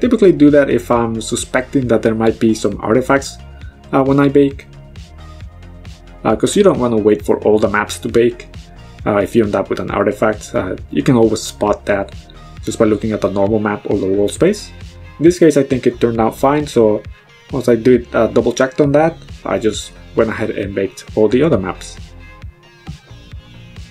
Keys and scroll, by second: 3.6 b, 8.0 b, 15.9 m.